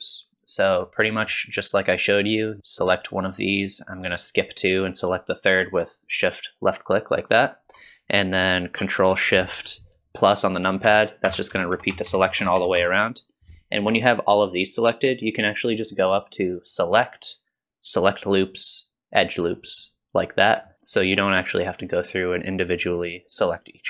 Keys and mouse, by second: 1.0 middle click, 6.0 shift+click, 10.9 ctrl+shift+KP_Add, 11.3 ctrl+shift+KP_Add, 11.5 ctrl+shift+KP_Add, 11.8 ctrl+shift+KP_Add, 11.9 ctrl+shift+KP_Add, 12.1 ctrl+shift+KP_Add, 12.3 ctrl+shift+KP_Add, 12.4 ctrl+shift+KP_Add, 12.6 ctrl+shift+KP_Add, 12.8 ctrl+shift+KP_Add, 16.7-19.5 drag, 20.7 middle click.